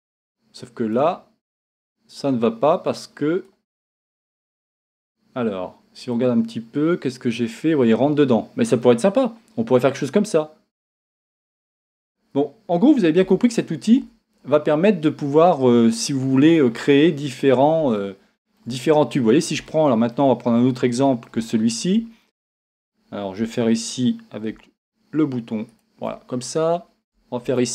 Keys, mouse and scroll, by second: 3.5 click, 6.1-9.9 middle drag, 9.9-11.6 drag, 12.0-13.2 scroll down 1, 13.2 Tab, 14.3 scroll up 1, 16.4 scroll down 1, 18.0-25.7 shift+middle drag, 18.8 scroll down 1, 20.3 scroll up 2, 20.4-20.8 scroll down 2, 25.7-27.7 shift+right drag.